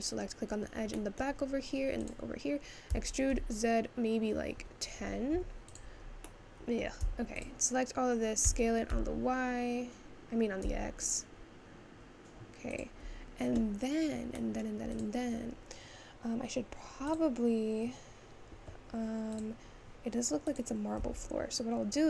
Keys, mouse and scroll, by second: 1.1 middle click, 1.6-2.1 scroll up 3, 2.1 click, 3.0 e, 6.2-7.2 middle drag, 7.2 Tab, 7.4 click, 8.8 s, 14.6 middle click, 15.0 click, 17.2 click, 21.1 Tab.